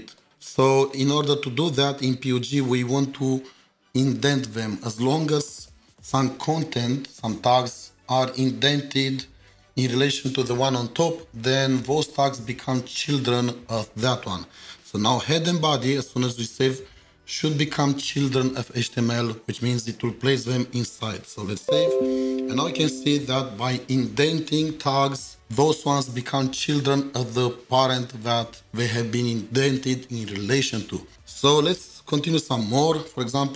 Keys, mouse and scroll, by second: 4.2 typing, 4.7 Tab, 33.1 Tab.